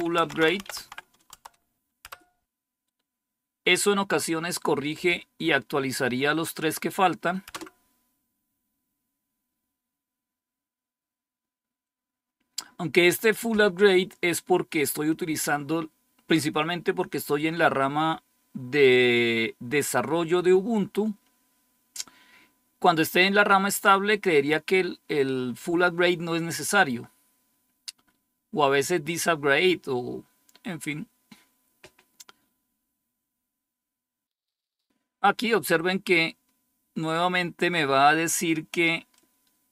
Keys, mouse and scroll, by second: 0.0-2.2 typing, 1.2 Tab, 2.0 Return, 7.4 Return, 39.0-39.7 drag.